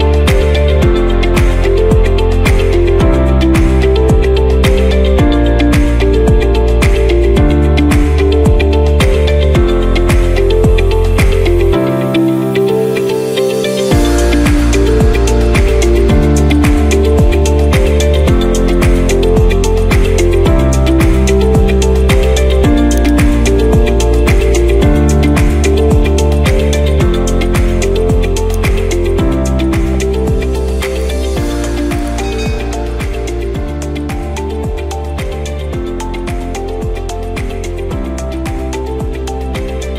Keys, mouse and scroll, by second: 10.8 middle click, 13.6 middle click, 18.0 middle click, 18.7-19.0 scroll down 2, 23.1 click.